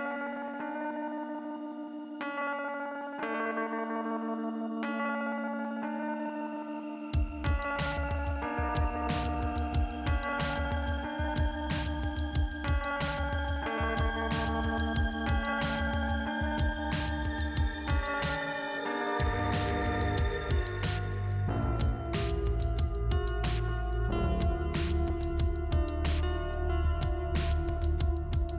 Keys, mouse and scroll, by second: 0.0 click, 1.3 click, 3.1 scroll down 1, 6.0 click, 7.4 click, 13.1 click, 14.0 i, 15.1 k, 16.2 scroll up 1, 17.0 click, 19.7 shift+Return, 20.2 click, 21.5 click, 22.4 click, 23.3 click, 25.5 click, 26.3 click, 27.0 click.